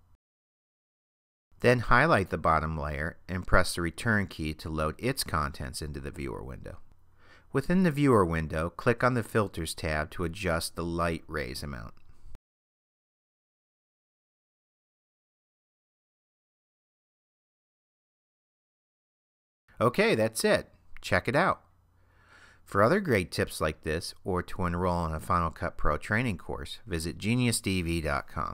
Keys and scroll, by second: 3.8 Return.